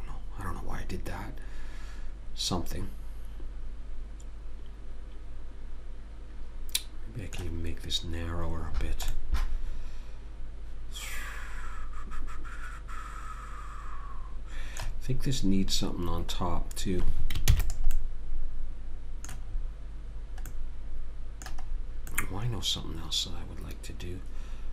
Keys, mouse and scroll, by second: 8.9-10.0 middle drag, 16.1-17.5 middle drag, 17.5 ctrl+s, 18.2 middle click, 23.1 middle click, 23.8 middle click.